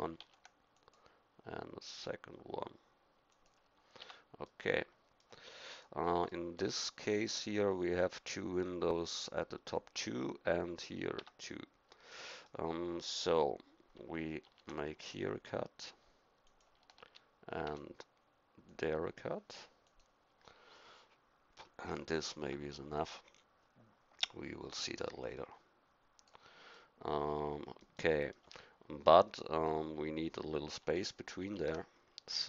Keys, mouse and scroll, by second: 0.2 ctrl+r, 4.0 Tab, 4.4-5.7 middle drag, 5.7-7.4 drag, 7.5-11.2 drag, 11.2 Tab, 12.1-14.4 middle drag, 14.5 ctrl+r, 17.1 ctrl+r, 23.0-26.3 middle drag, 26.8-31.4 middle drag, 31.4 ctrl+r.